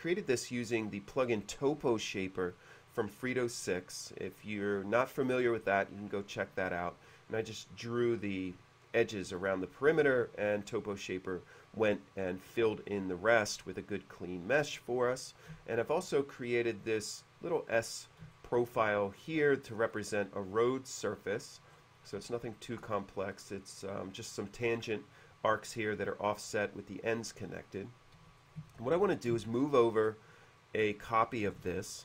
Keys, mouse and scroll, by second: 3.7-4.4 middle drag, 10.1-10.8 middle drag, 14.9-16.0 middle drag, 16.6-17.2 middle drag, 18.5-19.5 shift+middle drag, 19.8-20.1 scroll down 1, 21.9-22.2 scroll up 1, 22.5 shift+middle click, 27.9 click, 28.4 w, 28.5 click, 31.5 shift+click.